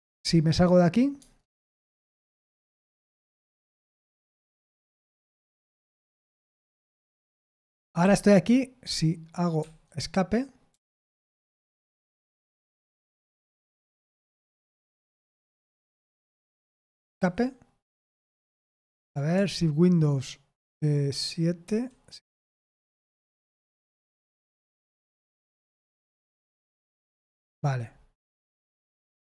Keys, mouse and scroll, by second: 1.1 Tab, 1.9 Tab, 2.9 j, 3.8 BackSpace, 4.0 BackSpace, 4.7 Down, 4.9 Up, 5.2 Up, 5.3 Down, 5.7 Down, 7.1-7.6 Down, 9.5 Escape, 10.7 j, 11.5 BackSpace, 12.1 Escape, 14.2 Return, 15.3 j, 16.2 BackSpace, 16.5 Escape, 17.1 Escape, 21.6 super+/, 22.5 super+/.